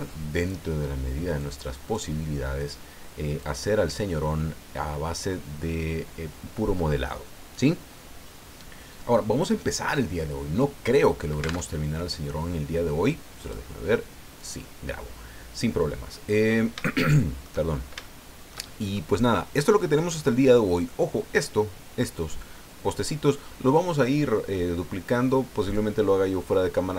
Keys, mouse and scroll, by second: 0.8-1.2 scroll up 2, 1.4 click, 2.9 scroll down 2, 3.5 click, 11.7 alt+Tab, 13.4 click, 14.4 click, 16.4 scroll up 2, 16.8 shift+middle click, 17.7 shift+scroll up 2, 18.0-19.1 shift+middle drag, 19.3 shift+scroll up 2, 19.4 shift+middle click, 20.2-20.5 scroll up 2.